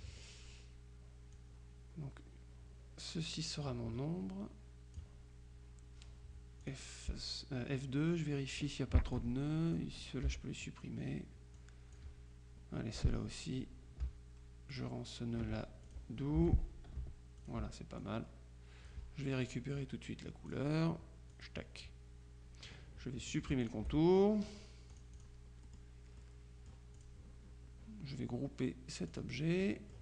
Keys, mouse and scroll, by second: 0.0 click, 1.5-5.5 drag, 6.7 click, 9.2 click, 11.6 click, 12.1 Delete, 14.8 ctrl+click, 15.9 click, 16.5 Delete, 17.5-19.4 ctrl+drag, 20.6 click, 21.4 click, 23.7 shift+click, 25.0-25.8 drag, 26.3 click, 27.1 click, 29.2 click.